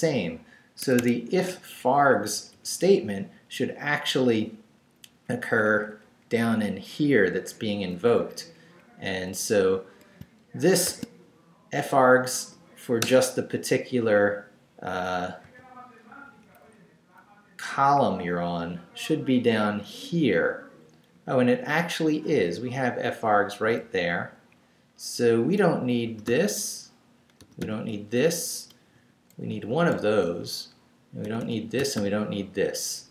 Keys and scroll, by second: 0.8 Escape, 1.2 Up, 2.3 Right, 5.1 Down, 6.5 Up, 7.8 Up, 10.8 shift+v, 13.0 Return, 14.0 Up, 15.4 y, 16.2 Down, 17.9 Down, 21.1 Down, 22.3 Right, 23.8 Right, 24.5 Up, 26.0 d, 28.9 Left, 29.7 x, 30.3 Down, 31.2 d.